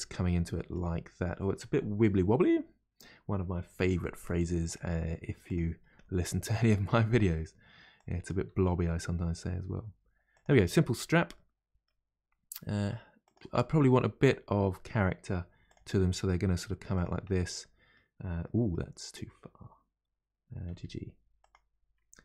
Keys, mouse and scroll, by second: 0.0-2.5 middle drag, 2.5-3.8 scroll down 2, 3.8 g, 5.5 click, 6.0 g, 8.0 click, 8.5 g, 10.8-11.4 scroll down 2, 11.4-13.2 middle drag, 13.2 click, 13.6 middle click, 14.5 g, 17.3-20.7 middle drag, 20.7 g.